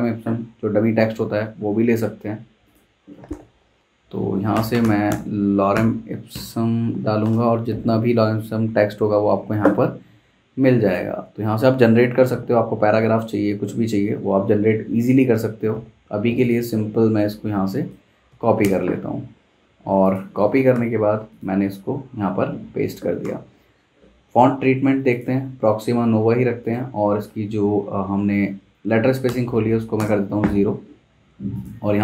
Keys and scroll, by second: 1.2 v, 3.3 super+t, 4.3-6.3 typing, 7.2 Return, 18.3 super+c, 18.6 super+Tab, 20.8 t, 21.9 super+v, 22.6 Escape, 23.3 v, 29.4 o, 30.0 Return.